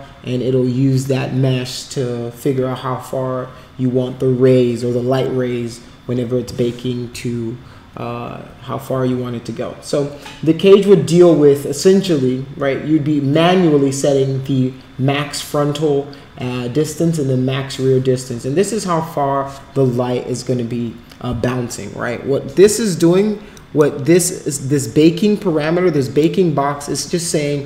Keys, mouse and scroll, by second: 23.5 click, 24.1-26.2 drag.